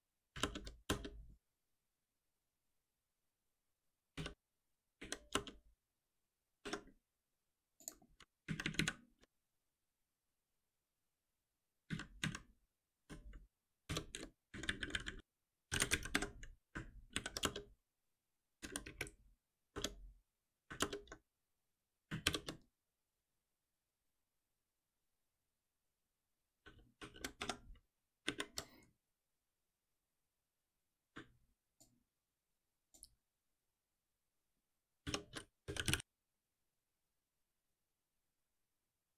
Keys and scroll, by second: 0.3 alt+Return, 13.8 shift+F10, 16.1 Escape, 17.1 alt+Delete, 21.7 ctrl+s, 22.2 shift+F10, 31.7 ctrl+b.